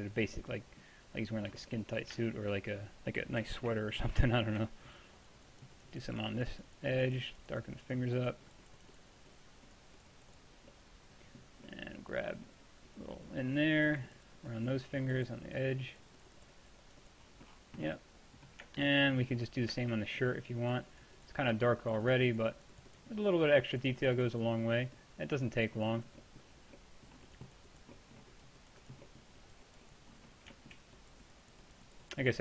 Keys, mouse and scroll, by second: 5.2-6.8 middle drag, 6.8-10.8 drag, 10.8-12.1 middle drag, 13.0-14.1 drag, 17.3-17.9 drag, 17.9-18.9 middle drag, 20.7-32.4 middle drag.